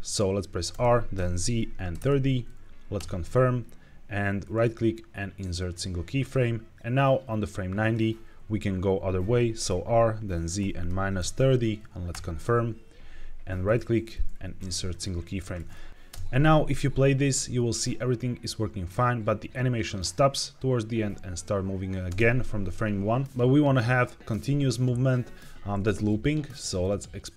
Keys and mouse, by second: 0.6 r, 1.0 z, 1.8 KP_3, 1.9 KP_0, 2.9 KP_Enter, 4.4-5.6 drag, 6.8-7.8 drag, 9.5 r, 10.5 z, 10.7 KP_Subtract, 11.1 KP_3, 11.2 KP_0, 12.0 KP_Enter, 13.6-14.9 drag, 15.9 space, 16.0 space, 22.0 space, 26.7 click.